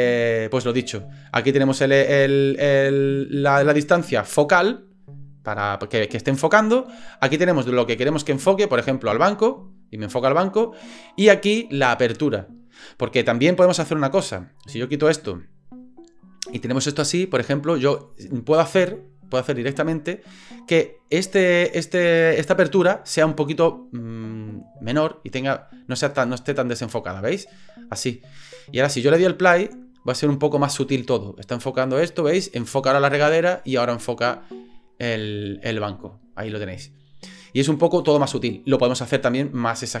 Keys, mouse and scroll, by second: 8.4 click, 14.7 click, 15.9 click, 16.4-18.2 drag, 18.8 click, 24.6-28.4 drag, 29.7 click, 38.1 space, 39.5-40.0 drag.